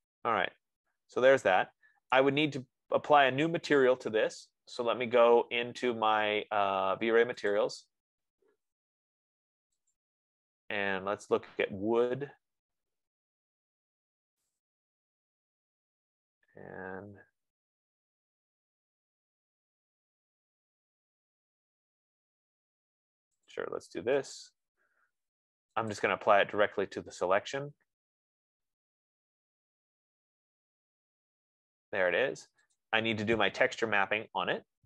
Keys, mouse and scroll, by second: 2.4 right click, 3.3 F15, 7.9 click, 10.4 click, 15.1 click, 16.0-17.9 scroll, 18.3-18.9 scroll, 19.0-19.7 scroll, 21.0 scroll, 23.9 click, 24.6 right click, 26.3 click, 33.3 click, 34.3-34.8 scroll.